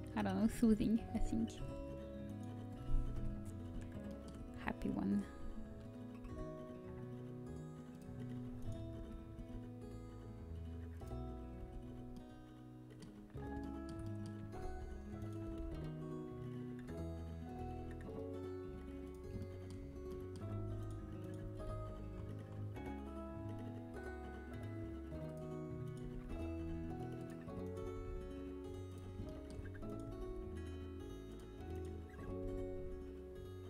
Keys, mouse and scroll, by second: 0.9 g, 3.1 KP_7, 7.4 g, 8.9 z, 9.3 g, 11.2 middle click, 11.5 z, 12.1-14.6 middle drag, 14.9 a, 15.4 g, 21.4-23.1 drag, 21.4 g, 25.8-29.2 right drag, 26.0 g, 32.2 g.